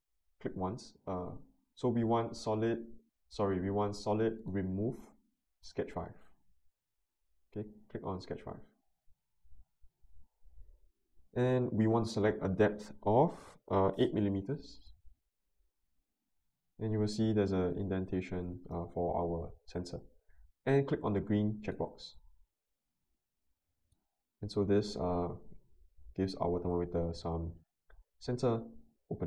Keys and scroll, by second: 14.3 8, 14.7 Return.